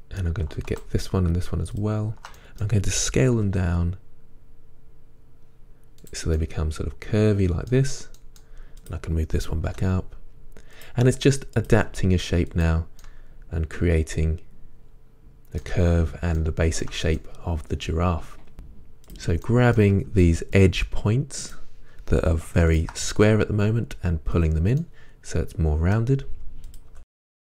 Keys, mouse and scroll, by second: 0.0 middle click, 2.6 middle click, 6.2 middle click, 7.0 middle click, 11.7 middle click, 13.4-14.5 middle drag, 16.8 shift+middle click, 17.8 middle click, 19.7-21.6 middle drag, 21.6 click, 22.8 shift+click, 23.2 g, 24.5 click, 24.8-26.8 middle drag, 26.8 click, 27.1 shift+middle click, 27.1 g.